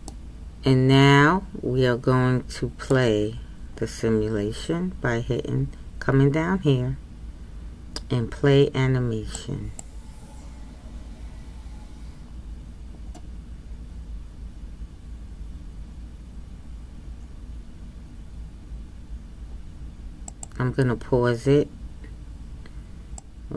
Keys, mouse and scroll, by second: 0.1-9.9 middle drag, 9.9-23.5 drag.